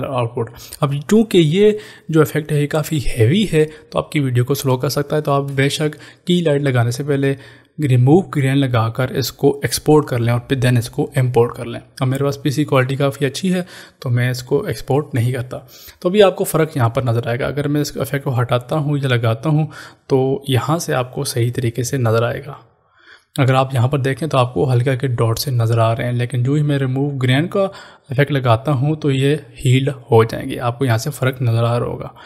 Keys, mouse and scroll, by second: 18.2 click, 22.6-24.4 scroll up 1, 28.4 click.